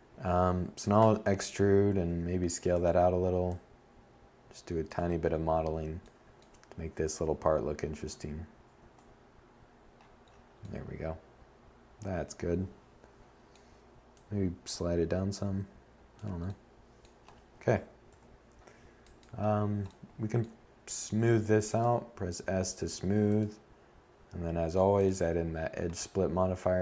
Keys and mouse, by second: 0.0 s, 6.8 Tab, 16.1 7, 23.5-23.9 middle drag.